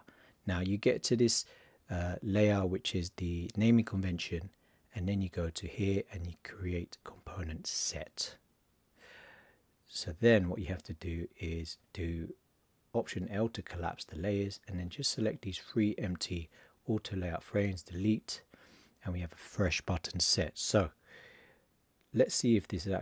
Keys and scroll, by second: 13.1 alt+l.